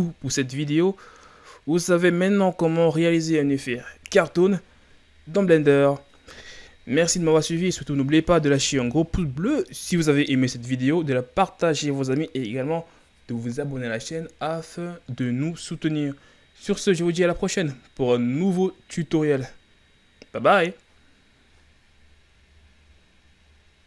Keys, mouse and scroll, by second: 1.1 scroll up 1.